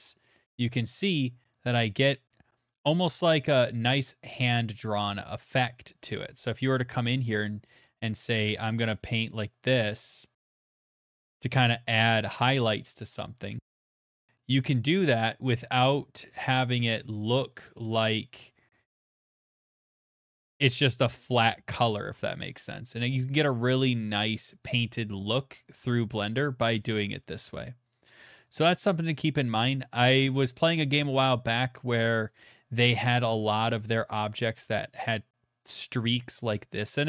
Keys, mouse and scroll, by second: 0.0 click, 0.5 click, 1.1 click, 1.7 click, 2.6 click, 2.7 click, 3.0 click, 3.5 click, 5.1 middle click, 6.4-7.3 ], 7.8 click, 7.8 ], 8.2 click, 8.6 click, 9.1 click, 9.6 click, 10.1 click, 10.4 click, 10.7 click, 10.9 middle click, 11.2 middle click, 11.5 click, 11.9 click, 12.5 middle click, 12.8 click, 13.3 click, 14.3 middle click, 14.9 middle click, 15.2 click, 15.5 click, 16.3 [, 16.5-17.3 [, 17.5 click, 17.9 click, 18.8 click, 20.4 middle click, 21.4 click, 21.8 click, 23.2 click, 23.7 click, 24.3 click, 24.8 click, 25.3 click, 26.2 click, 26.8 click, 27.2 click, 28.2 click, 28.6 click, 29.6 click, 29.7 click, 30.4 click, 31.2 click, 31.5 click, 32.1 click, 33.5 click, 33.5 middle click, 34.1 click, 34.9 middle click.